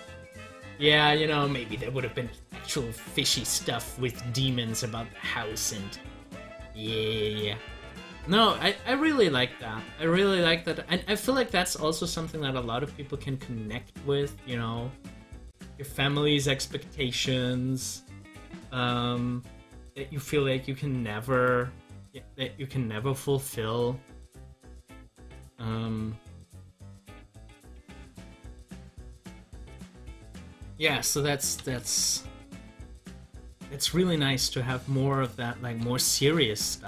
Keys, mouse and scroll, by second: 4.3 click, 11.3 click, 14.6 scroll up 1, 15.5 middle click, 16.5 scroll up 1, 21.3 click, 22.9 scroll down 1, 26.9 click, 33.4 ctrl+v, 35.1 click.